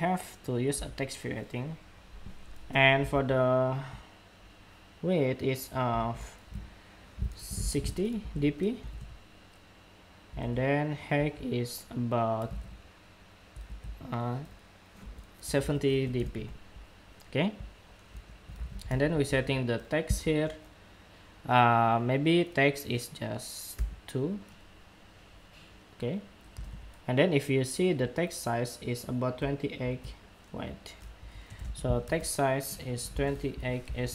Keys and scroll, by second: 2.8 super+Tab, 4.1 super+Tab, 5.7 super+Tab, 10.5 super+Tab, 12.2 super+Tab, 13.8 super+Tab, 26.3 super+Tab, 29.5 super+Tab.